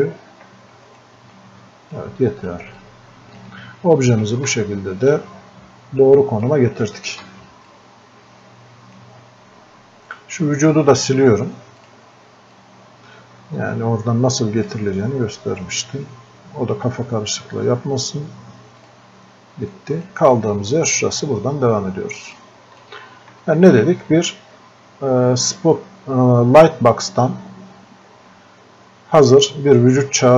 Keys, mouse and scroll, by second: 0.9 right click, 2.0-5.7 drag, 5.7-6.5 scroll up 1, 6.5-16.9 drag, 18.8 click, 20.6 scroll up 1, 22.4 click.